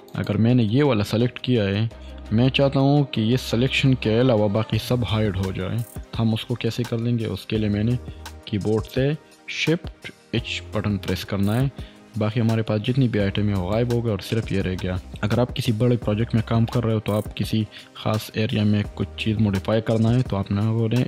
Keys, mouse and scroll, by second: 7.6 click, 10.4 shift+h, 13.5 click, 14.3-16.6 middle drag.